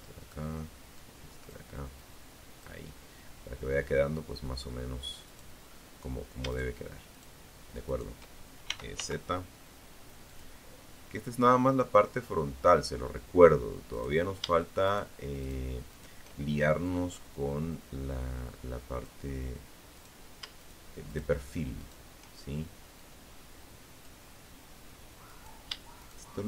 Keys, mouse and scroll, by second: 0.1 click, 3.4 right click, 4.7 shift+right click, 5.3 shift+right click, 6.0 shift+right click, 6.8 shift+e, 7.1 z, 8.5 click, 9.5-11.0 drag, 12.1 right click, 13.0 shift+right click, 13.6 shift+right click, 14.1 shift+right click, 15.0-17.4 drag, 18.1 right click, 18.7 shift+right click, 19.2 shift+right click, 19.9 shift+right click, 21.1-22.4 drag, 23.5 right click, 24.1 shift+right click, 24.9 shift+right click, 25.7 shift+right click.